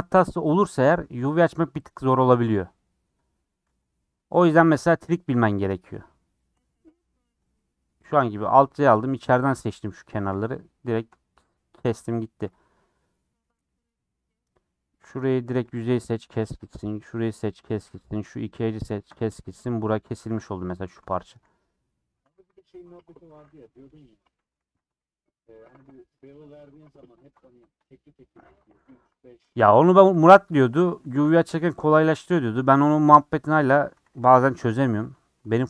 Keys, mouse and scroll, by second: 0.1 middle click, 1.0-1.9 scroll up 1, 1.9 scroll up 1, 1.9 click, 3.9 click, 7.5 click, 7.8 scroll down 2, 7.9 middle click, 8.3-8.8 scroll up 4, 9.2 scroll down 4, 9.4 middle click, 10.2 alt+z, 10.5 middle click, 10.6 scroll up 3, 10.9 shift+middle click, 11.6-11.9 scroll down 3, 12.5 click, 13.0-15.1 middle drag, 15.1 click, 15.4 3, 15.6 click, 16.0 middle click, 16.5 click, 17.0 middle click, 17.5 typing, 17.7 click, 18.0 middle click, 19.0 shift+click, 19.4 middle click, 19.9 scroll down 1, 20.0 middle click, 20.7 scroll down 2, 20.9 shift+middle click, 21.5 scroll up 2, 21.7 middle click, 22.1 3, 22.4 alt+click, 22.9 scroll down 1, 23.0 middle click, 23.8 ;, 24.6 ctrl+z, 24.9 scroll down 3, 25.0 middle click, 25.4-25.7 scroll up 3, 25.9 click, 26.1-27.2 middle drag, 27.2 ctrl+click, 27.8 shift+click, 28.4 shift+click, 29.0 ;, 29.6-31.9 middle drag, 31.9 3, 32.1-33.6 drag, 33.6 KP_Add, 35.2 Tab, 35.3 middle click.